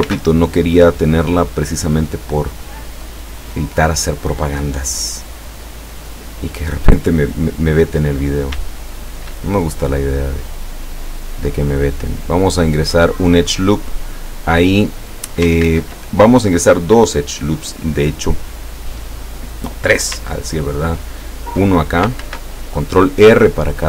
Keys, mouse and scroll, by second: 0.1 ctrl+r, 0.8 click, 6.6 click, 7.9 middle click, 8.3 right click, 9.1 shift+right click, 9.5-11.3 shift+middle drag, 11.7-15.4 drag, 15.7 ctrl+z, 22.2 ctrl+r, 23.0 click.